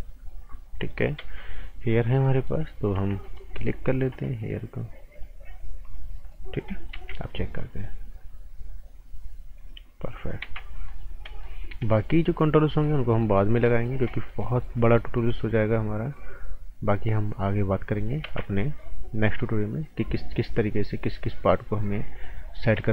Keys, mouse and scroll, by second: 1.2 ctrl+z, 2.2 right click, 3.2 alt+right click, 5.1 click, 6.1 right click, 6.5 scroll down 1, 6.6 right click, 6.9 z, 7.5 click, 10.4 ctrl+z, 10.6 scroll down 1, 10.8 right click, 11.1 scroll up 1, 11.2 right click, 11.6 scroll up 1, 11.8 right click, 13.2 right click, 13.5 scroll down 1, 13.6 right click, 13.9 scroll up 1, 14.0 right click, 15.6 click, 18.2 ctrl+z, 18.4 scroll up 1, 18.6 right click, 19.2 click, 22.8 ctrl+z.